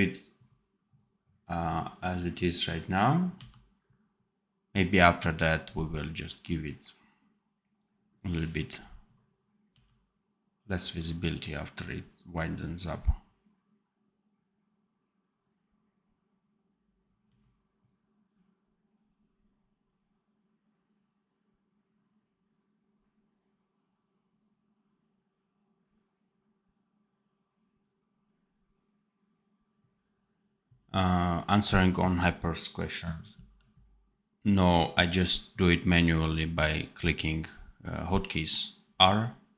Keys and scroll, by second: 3.3 d, 9.6 d, 17.1 d.